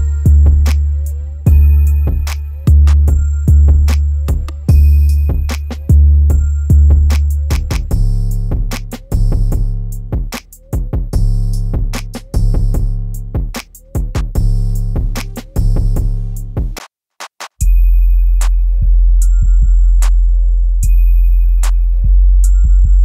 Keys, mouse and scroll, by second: 2.0 click, 6.9 right click, 8.8 click, 11.2-12.3 scroll down 1, 13.5-16.2 drag, 16.2 right click, 16.7-17.0 scroll up 1, 18.7-20.3 shift+drag, 20.3-22.0 drag, 22.0-22.6 scroll down 1.